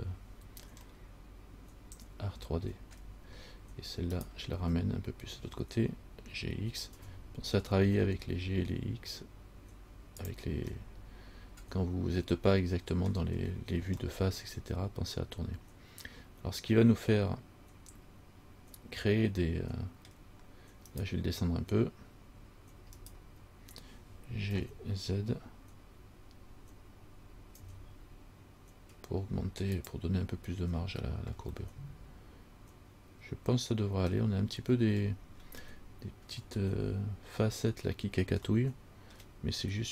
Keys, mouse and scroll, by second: 1.1 middle click, 1.1 scroll up 1, 3.2 scroll down 1, 4.4 right click, 7.1 g, 11.1 middle click, 14.3 middle click, 21.1 right click, 23.2 shift+right click, 24.8 g, 31.8 middle click, 35.2-35.9 scroll up 6, 35.9 middle click, 36.6-37.9 scroll down 1, 38.7 shift+scroll up 1, 38.8 shift+middle click, 39.3 shift+scroll down 1.